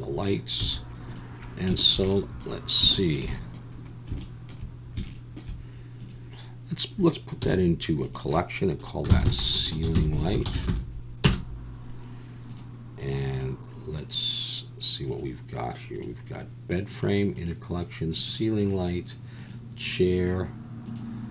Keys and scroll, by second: 0.6 z, 7.4 m.